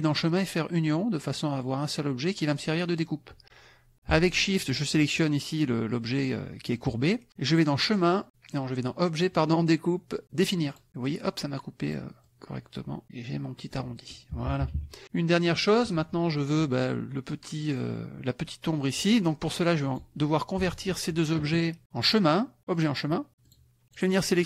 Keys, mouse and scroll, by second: 0.9 click, 4.7 shift+click, 7.5 click, 10.7 click, 11.9 click, 12.2-13.8 drag, 14.3 KP_Subtract, 15.0 middle click, 15.4 middle click, 19.2 click, 19.9 click, 20.6 shift+click, 22.1 click, 22.7 click, 23.5 click, 23.9 click.